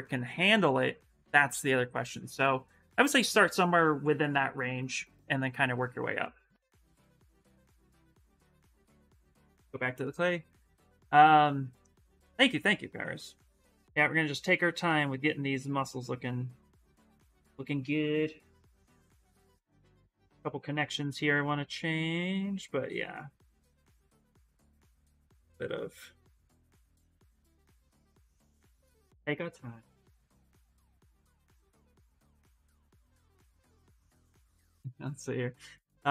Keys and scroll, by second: 7.4 s, 8.8-10.0 typing, 12.3 s, 17.9-19.0 typing, 20.4 s, 27.8 s, 29.4-30.6 typing.